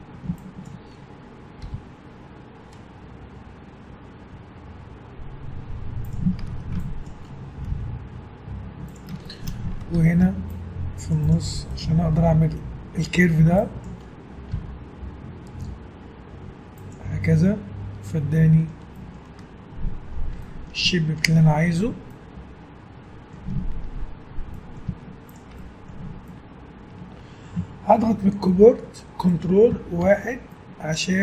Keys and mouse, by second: 0.0 a, 1.6 g, 6.5 a, 7.7 g, 10.0 ctrl+r, 11.7 click, 13.2 a, 13.5-16.1 drag, 14.5 g, 21.0-22.9 middle drag, 23.7 middle click, 24.6 middle click, 24.9 z, 26.0 Tab, 29.4 click, 30.1 ctrl+1.